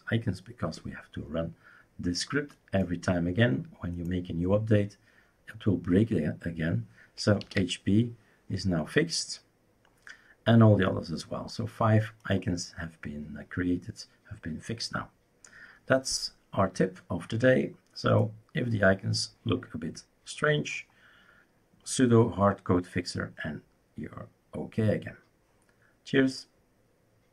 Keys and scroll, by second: 7.2-8.1 typing.